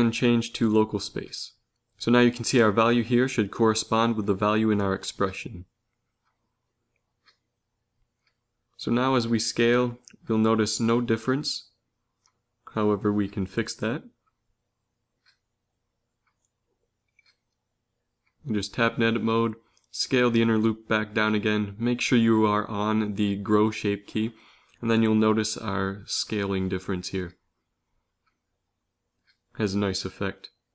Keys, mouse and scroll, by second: 0.2-2.1 drag, 9.4 s, 18.5 Tab, 19.5 s, 23.1 Tab, 24.2 s.